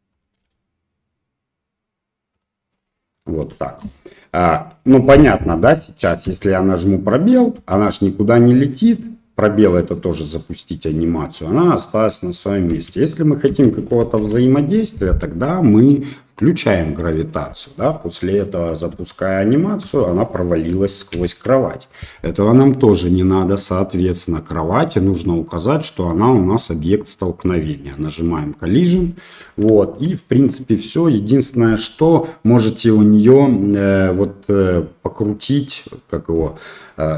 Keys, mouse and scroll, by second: 0.4 g, 2.8 middle click, 3.6 shift+middle click, 4.0 middle click, 6.3 space, 7.6 space, 7.9-8.7 middle drag, 10.8-12.5 middle drag, 12.7 space, 13.5 space, 14.2 shift+Left, 16.6 click, 17.6-18.1 middle drag, 18.9 space, 19.9 space, 21.1 shift+Left, 24.2 click, 25.2 middle click, 27.6 click, 29.0 middle click, 29.7 shift+middle drag.